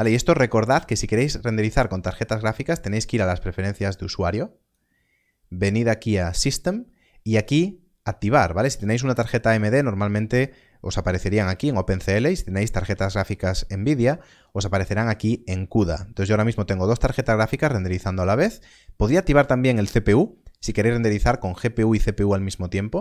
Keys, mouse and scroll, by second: 1.1 click, 8.7 click, 12.0 click.